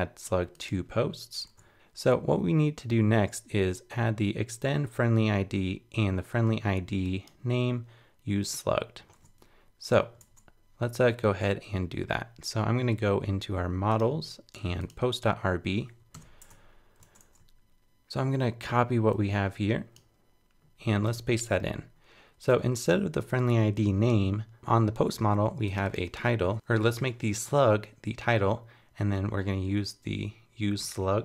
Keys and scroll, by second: 16.1 super+Return, 16.4 super+Tab, 21.1 super+v.